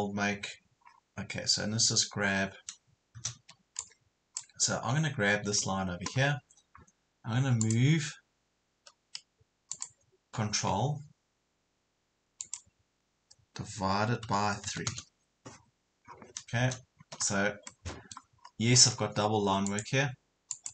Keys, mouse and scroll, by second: 0.9 scroll down 1, 3.3 space, 3.8-5.3 drag, 12.4 click, 14.7 KP_3, 16.1 scroll down 1, 17.7 middle click, 18.4-19.0 scroll up 2, 19.7 click.